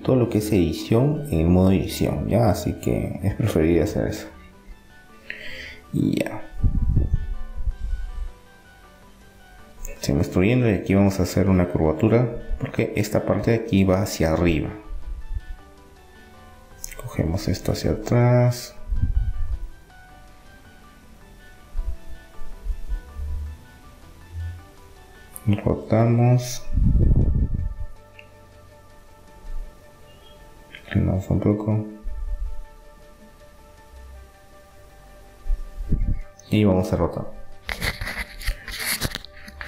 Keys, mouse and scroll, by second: 0.4-2.4 drag, 4.0 KP_3, 5.7 KP_1, 7.0-10.4 middle drag, 12.2 e, 13.7-15.4 drag, 15.4-18.0 right drag, 16.9-18.8 drag, 18.8 middle click, 20.4-22.9 right drag, 27.3-29.0 drag, 29.0 middle click, 29.9 r, 31.9 e, 33.0-34.7 drag, 34.9-36.4 drag, 36.7 click, 36.9 r.